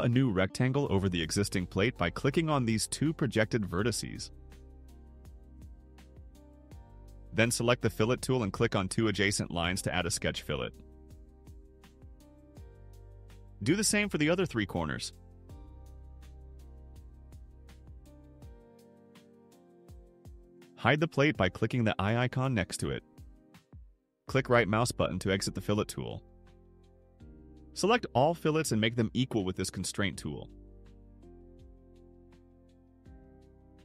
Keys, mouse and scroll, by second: 0.6 click, 3.4 click, 10.6 click, 12.2 click, 12.8 click, 14.4 click, 15.1 click, 16.4 click, 17.1 click, 18.5 click, 19.1 click, 22.1 click, 24.3 right click, 26.6 middle click, 26.6 scroll, 27.0 middle click, 27.0 scroll, 27.8 click, 29.0 click, 30.0 click, 30.8 click.